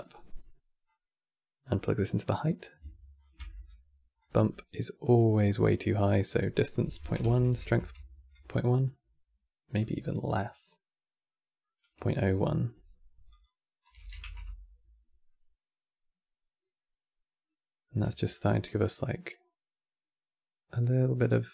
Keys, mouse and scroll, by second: 0.6 click, 2.0 middle click, 2.9 ctrl+shift+click, 3.1-3.9 middle drag, 3.9 click, 4.5 middle click, 5.1-5.9 scroll up 7, 5.9-8.9 drag, 9.5-12.5 drag, 13.0-15.0 drag, 15.0-18.0 middle drag, 18.0-21.0 shift+drag.